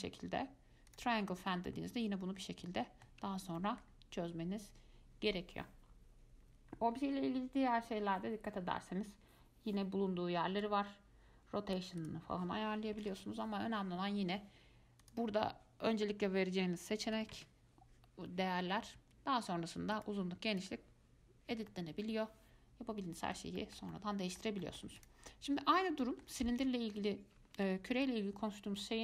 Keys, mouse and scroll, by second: 1.8 scroll up 1, 1.9-4.6 middle drag, 4.6-5.9 scroll down 2, 5.9-6.6 scroll down 1, 6.6-7.2 scroll down 1, 7.2-7.8 scroll down 1, 10.8-18.3 drag, 20.1 click, 21.9-25.2 middle drag, 25.2 click, 26.2 shift+middle click, 26.8 ctrl+z, 28.2 x.